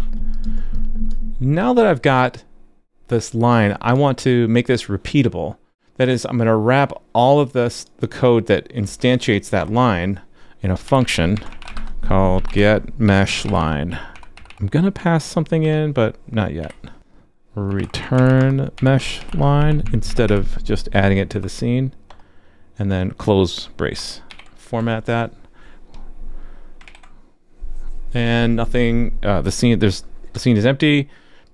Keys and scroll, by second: 26.8 super+s.